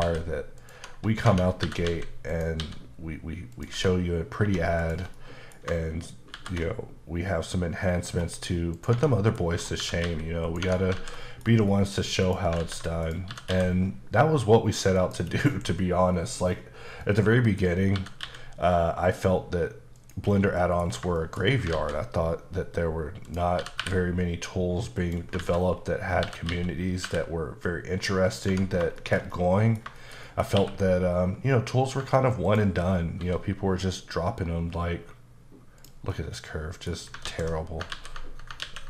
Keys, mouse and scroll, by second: 0.6 click, 0.8 Tab, 1.3 Tab, 1.7-2.7 typing, 2.4 click, 3.6 click, 3.8 Tab, 4.5 1, 4.9 click, 5.2 middle click, 6.4 ctrl+shift+b, 8.0-8.8 scroll up 2, 8.8 click, 9.0 Tab, 9.2 middle click, 9.5-9.8 scroll up 2, 9.8 typing, 10.5 click, 10.7 Tab, 10.9 scroll down 2, 11.0 alt+z, 11.2 middle click, 12.3 click, 12.6 alt+z, 13.1 click, 13.3 typing, 15.0 click, 16.2-17.0 scroll down 8, 17.0 middle click, 17.6-18.0 scroll up 2, 18.0-18.3 typing, 20.0 click, 20.3-20.6 scroll down 2, 20.6 middle click, 20.9 scroll down 2, 21.2 shift+middle click, 21.7 alt+z, 22.8-23.3 scroll down 2, 23.3 click, 23.6 typing, 25.0 click, 25.8-26.3 scroll up 5, 26.3-27.1 typing, 28.4 click, 28.5 Tab, 28.7 scroll down 2, 29.0 shift+middle click, 30.0 shift+middle click, 30.6 q, 32.5 ctrl+click, 33.2 s, 35.8 click, 36.1 middle click, 37.3 alt+s, 37.9 ctrl+z, 38.7 ctrl+a.